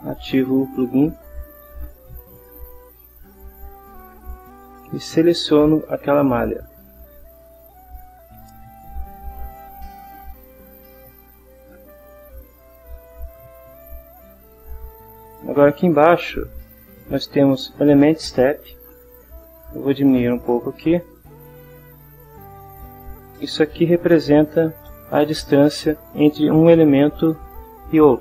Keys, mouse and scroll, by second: 1.1 click, 2.6 click, 4.8 click, 6.1 click, 7.0 scroll up 1, 9.6 click, 20.7 click, 22.7 click, 24.2 Delete, 24.8 Return.